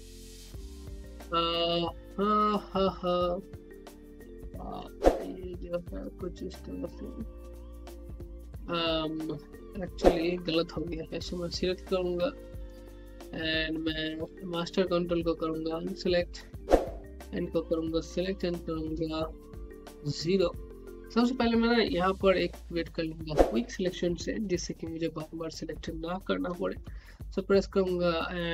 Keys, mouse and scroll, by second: 0.9 alt+middle click, 2.0-6.2 drag, 6.9 z, 7.8 click, 10.0-10.3 scroll down 1, 10.5 alt+click, 11.4 scroll up 1, 11.6 alt+click, 14.8-18.4 ctrl+drag, 18.4 ctrl+x.